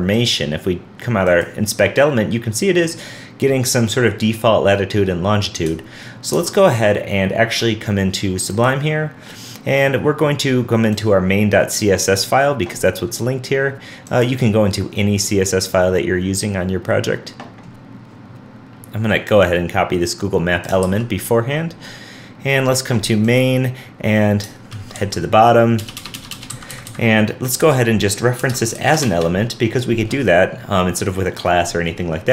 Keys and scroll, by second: 6.5 super+Tab, 20.8 super+c, 27.6 super+v.